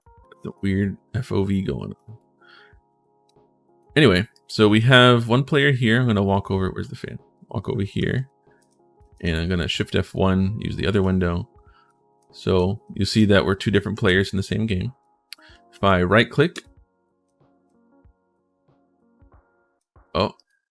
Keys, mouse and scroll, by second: 3.0 click, 4.1 click, 4.3-8.9 typing, 9.8 right click, 10.5-11.3 typing, 12.3 a, 13.7-17.7 typing, 16.3 right click, 19.3-20.7 typing, 20.1 right click.